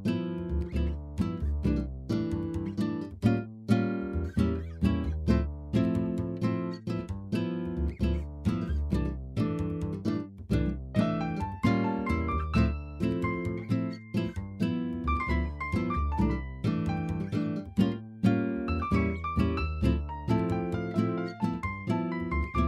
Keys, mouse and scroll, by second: 1.2 s, 4.1 KP_3, 4.8 shift+middle click, 5.9-8.3 drag, 9.1 s, 9.5 y, 9.9 KP_0, 10.1-11.6 drag, 12.6 click, 13.5 click, 15.0 click, 15.6-18.0 drag, 18.2-20.3 drag, 20.3 s, 20.5 y.